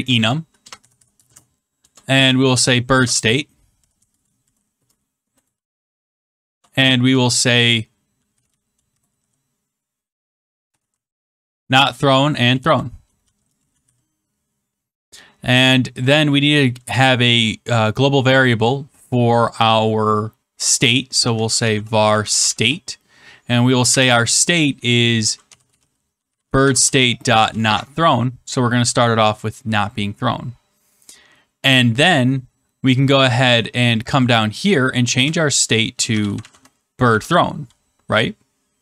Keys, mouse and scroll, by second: 0.0-1.7 typing, 3.8-6.4 typing, 6.9 Return, 8.0-11.6 typing, 12.9-14.3 typing, 16.0 click, 21.0-22.9 typing, 24.5-27.9 typing, 32.4-34.0 scroll, 34.2 click, 34.6 click, 35.1 Return, 35.6-37.0 typing.